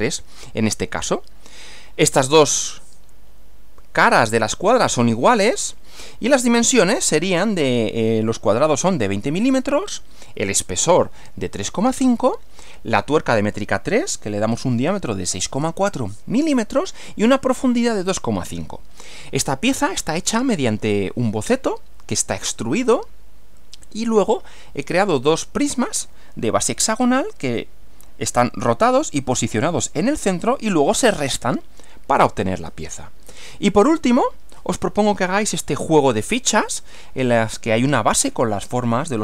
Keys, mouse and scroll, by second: 6.0 Right, 33.3 Right.